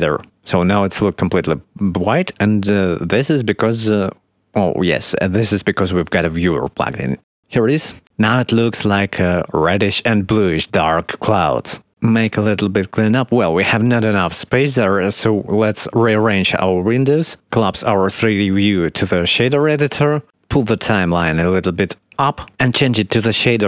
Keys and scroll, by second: 7.7 0.